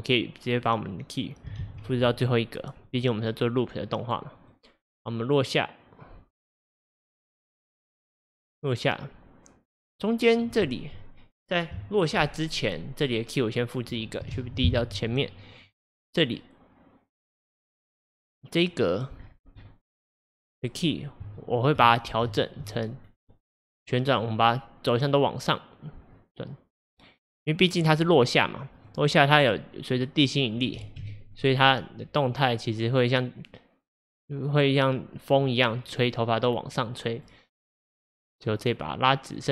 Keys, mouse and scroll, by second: 1.7 shift+d, 4.6-7.6 drag, 13.1-14.5 drag, 14.5 shift+d, 15.8-18.7 drag, 19.3 scroll down 1, 20.9 scroll up 1, 21.4-21.8 shift+middle drag, 21.8-22.4 scroll up 5, 22.4-23.1 shift+middle drag, 23.1-24.1 scroll up 1, 24.1 scroll up 1, 24.2 drag, 25.0 click, 26.2 click, 28.8 click, 30.0 click, 30.9 ctrl+z, 31.5 click, 32.9 click, 33.9 click, 37.2 click, 38.6 click.